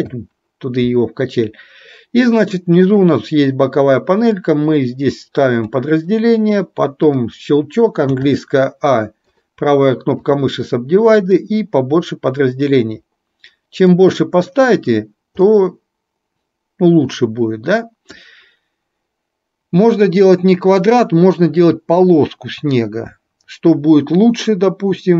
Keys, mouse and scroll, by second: 3.1 click, 4.3 click, 7.1 click, 9.3 right click, 11.4 click, 15.7-18.3 middle drag.